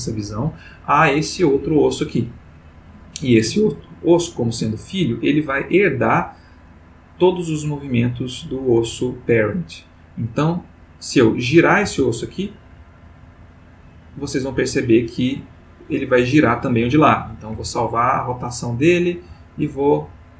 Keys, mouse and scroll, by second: 1.3 click, 6.6 click, 8.6 click, 11.8 r, 13.8 click, 17.5 i, 18.1 click, 18.9-20.0 drag.